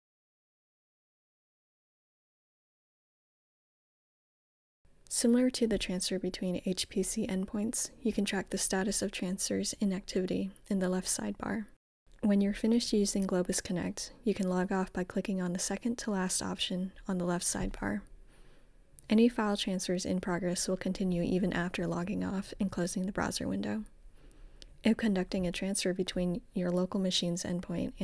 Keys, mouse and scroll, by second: 1.3 click, 5.0-6.6 drag, 10.9 click, 21.8-28.0 drag.